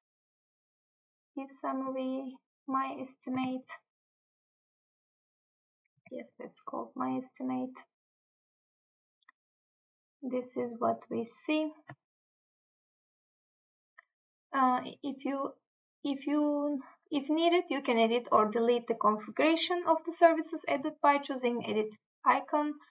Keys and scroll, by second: 3.5 Tab, 6.1 Tab.